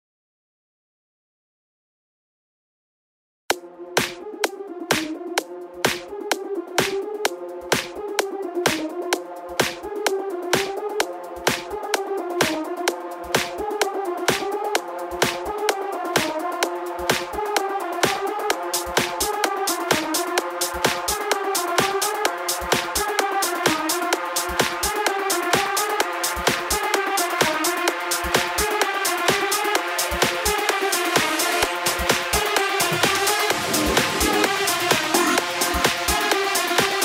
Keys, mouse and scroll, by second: 0.2 click, 0.9 click, 1.6 Tab, 2.4 click, 3.2 z, 10.0 b, 12.0-12.5 scroll up 4, 12.5-14.4 shift+middle drag, 14.4 c, 20.0 x, 21.2 KP_0, 22.0 Tab, 22.8 z, 23.6 click, 25.6 click, 26.8 click, 33.6 ctrl+s.